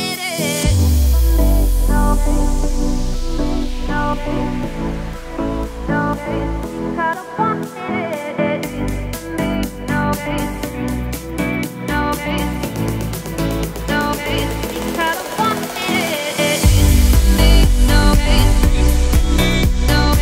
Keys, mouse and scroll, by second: 0.3 alt+x, 2.6-3.5 scroll up 2, 3.5-6.6 shift+drag, 6.9 click, 7.9 click, 9.2 click, 9.6-10.4 scroll down 1, 10.4 shift+middle drag, 10.6-13.8 scroll up 4, 18.0-19.5 scroll down 2, 19.5-20.2 middle drag.